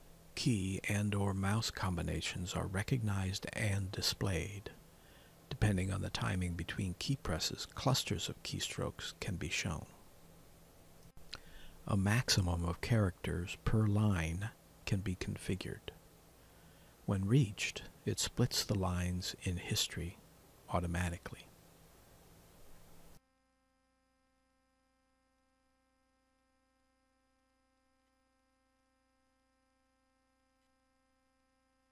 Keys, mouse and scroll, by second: 1.5 alt+Tab, 1.5 click, 6.0-8.7 typing, 14.5-18.3 typing, 21.2 4, 22.8 F3, 25.4-27.6 typing, 28.2 Return, 30.7 Return.